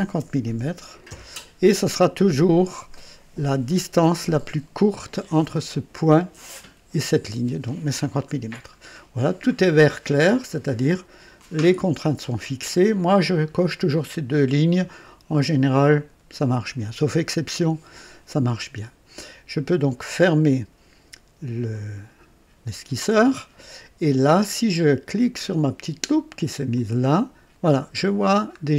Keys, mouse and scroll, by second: 0.2 KP_0, 1.1 KP_Enter, 2.5 scroll up 2, 3.7-5.3 drag, 8.3-8.7 scroll down 1, 21.7 click, 26.7 click, 28.1-28.6 scroll down 1.